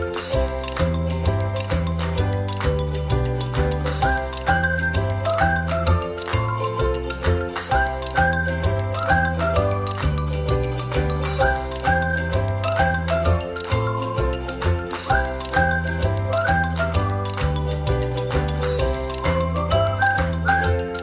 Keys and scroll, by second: 2.2 space, 19.3 space.